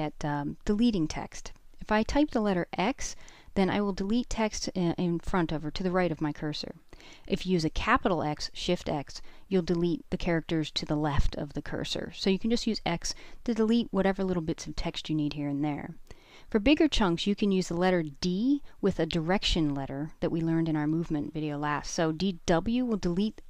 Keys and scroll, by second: 2.6 x, 3.1 x, 3.7 x, 6.1-6.7 typing, 8.4 x, 8.7 x, 17.8-18.7 typing, 20.3-21.6 typing.